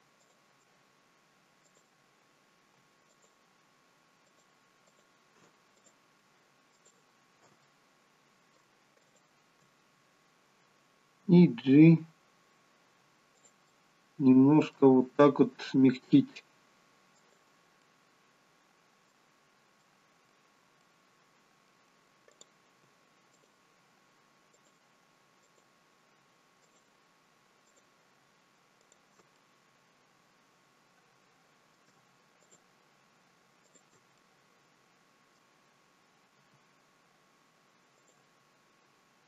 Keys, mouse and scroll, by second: 1.7 click, 2.7 shift+click, 3.1 alt+shift+click, 5.7 click, 6.8 alt+shift+click, 7.6 middle click, 9.0 shift+click, 11.2 g, 13.7 middle click, 15.0 g, 17.8 middle click, 19.8 middle click, 20.8 middle click, 22.3 click, 23.3 shift+click, 24.5 click, 25.5 shift+click, 26.6 shift+click, 27.6 shift+click, 28.8 shift+click, 29.4 middle click, 32.4 shift+click, 33.7 shift+click, 34.2 middle click, 36.4 g.